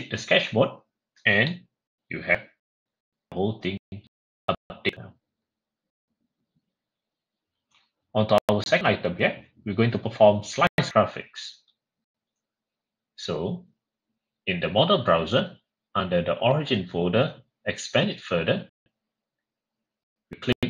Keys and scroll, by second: 1.2 typing.